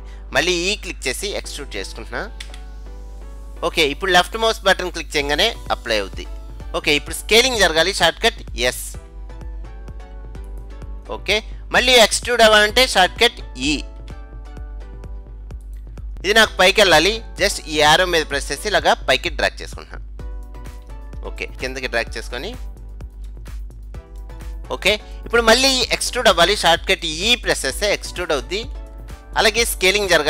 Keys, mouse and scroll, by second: 2.5 e, 9.0 s, 11.1-13.1 middle drag, 14.1 e, 16.1-18.4 middle drag, 18.4-20.2 drag, 21.5-23.6 middle drag, 24.0-25.8 scroll up 1, 25.8 scroll up 1, 25.9 middle click, 27.9 e.